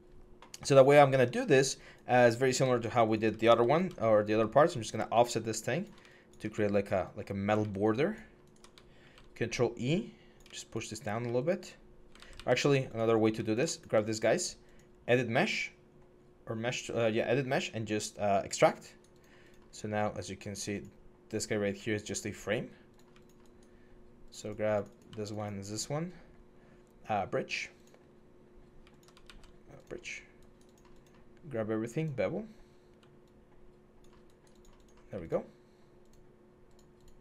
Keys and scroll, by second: 3.5 ctrl+e, 8.8 ctrl+e, 11.9 ctrl+z, 12.1 ctrl+z, 29.0 ctrl+z.